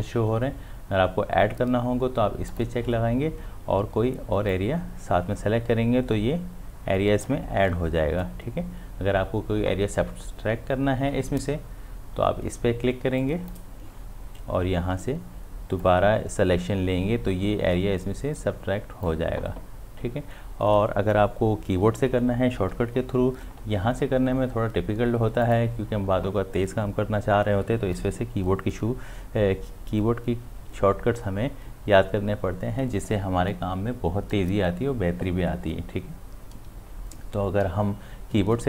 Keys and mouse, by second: 2.5-13.2 drag, 15.8-21.4 drag, 25.5 click.